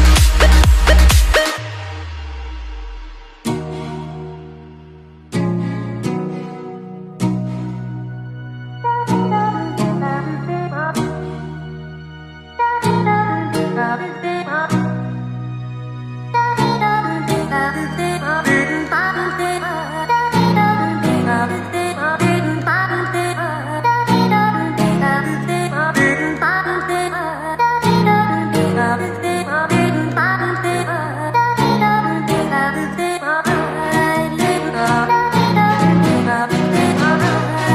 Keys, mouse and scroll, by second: 1.9 r, 2.8 g, 3.2 r, 3.7 g, 4.1-4.9 middle drag, 4.9-6.8 drag, 7.0 KP_7, 12.0-14.8 drag, 14.8 l, 24.3 shift+z, 24.8 shift+z.